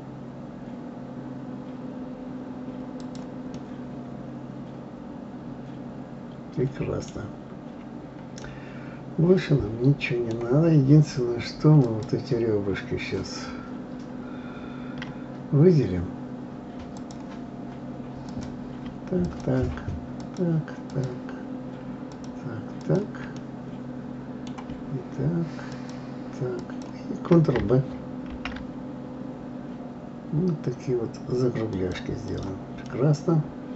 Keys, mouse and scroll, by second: 3.6-6.5 middle drag, 7.6-8.4 scroll up 3, 8.4-11.4 middle drag, 11.8 click, 13.0-14.4 scroll down 1, 16.9-18.4 drag, 19.2 shift+click, 20.2 shift+click, 20.9 shift+click, 22.1 shift+click, 22.8 shift+click, 23.4-25.7 middle drag, 25.7 shift+click, 26.6 shift+click, 28.3 ctrl+b, 32.3 click, 32.8-33.7 middle drag.